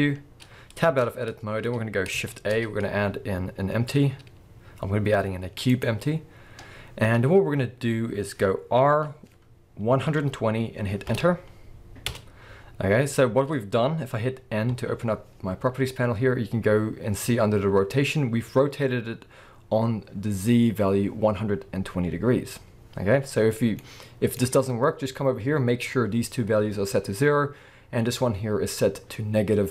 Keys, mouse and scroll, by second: 0.8 Tab, 2.3 shift+a, 6.3-6.9 scroll down 1, 6.9-8.5 scroll up 1, 8.9 r, 13.8 Return, 14.7 n, 23.8-27.9 middle drag.